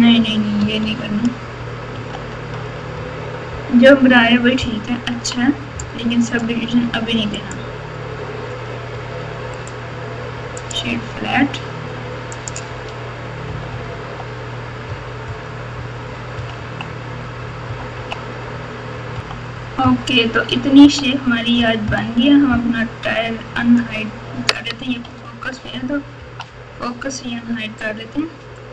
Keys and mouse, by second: 0.8 ctrl+z, 1.9 ctrl+z, 2.9 Tab, 5.1 KP_3, 7.4 click, 8.4 Tab, 8.9 Tab, 9.6-10.7 right drag, 10.8 Tab, 12.3 click, 12.6 Tab, 13.4-15.2 typing, 16.3 KP_2, 16.5 KP_2, 17.6 KP_4, 17.9 KP_2, 25.0 KP_Divide, 26.1 KP_3, 27.3 KP_1.